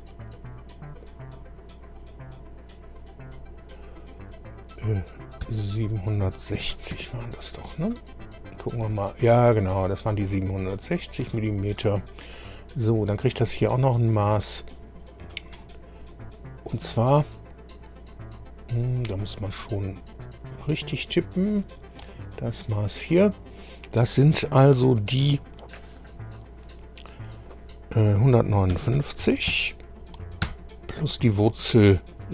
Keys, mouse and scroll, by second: 5.4 KP_7, 6.6 KP_6, 6.7 KP_0, 6.9 Return, 8.2-8.7 scroll up 1, 8.9-9.2 scroll up 1, 9.3-10.0 scroll down 2, 11.2 click, 12.3 scroll down 1, 13.6 click, 14.7 click, 16.1 click, 18.7 click, 19.1 click, 20.3 click, 21.5 click, 22.6 click, 28.7 KP_1, 29.0 KP_5, 29.5 KP_9, 30.4 KP_Add.